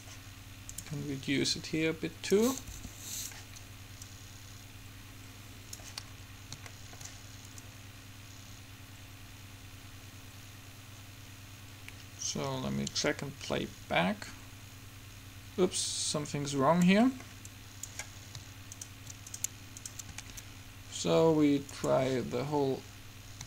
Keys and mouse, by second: 0.9 middle click, 1.5 right click, 1.7 middle click, 2.5-3.5 drag, 2.9 r, 4.2-6.1 drag, 7.7-9.7 drag, 17.6-19.0 drag, 19.0 middle click, 19.5-21.8 right drag, 21.8 middle click, 22.0-23.4 drag.